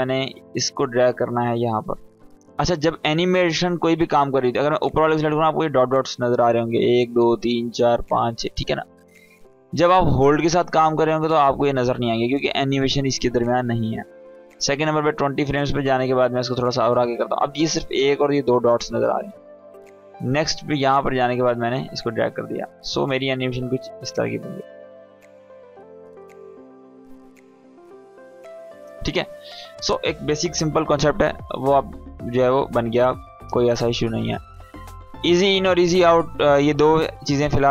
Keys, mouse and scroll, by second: 10.1 click, 13.6-15.2 drag, 22.5-26.6 drag, 26.8 space, 29.1 click, 30.7 Delete, 32.3 click, 32.6 Delete, 34.5 click.